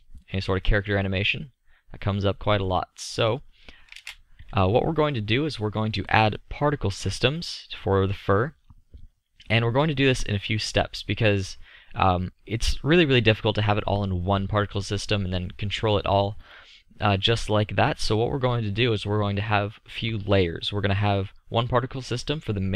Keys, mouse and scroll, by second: 4.0 shift+space, 6.2-11.5 drag, 19.7-22.2 middle drag.